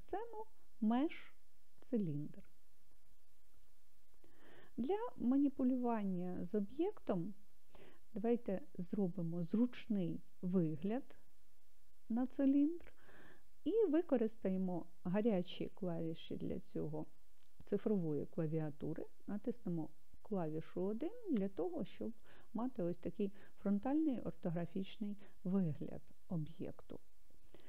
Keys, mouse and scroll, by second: 20.0 KP_1.